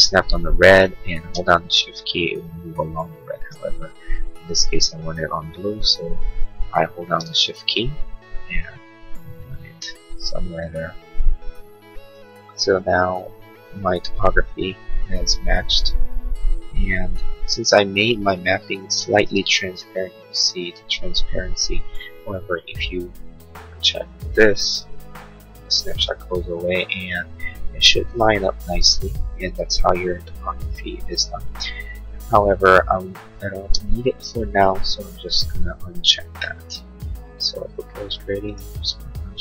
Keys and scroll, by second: 33.5 space.